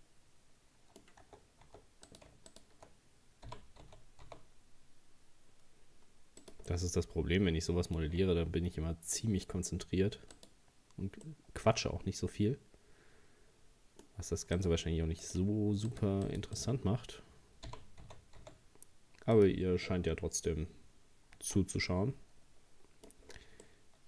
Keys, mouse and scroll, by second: 1.3 Tab, 1.7 Tab, 2.1 right click, 2.5 shift+right click, 3.5 g, 6.7-9.7 middle drag, 10.4 right click, 11.2 scroll up 1, 11.3-14.3 middle drag, 14.6 right click, 15.2 right click, 15.9 right click, 16.3 right click, 16.6 right click, 17.7 g, 21.4 Tab, 21.9-23.3 middle drag, 23.3-23.6 scroll down 3, 23.6-24.0 middle drag.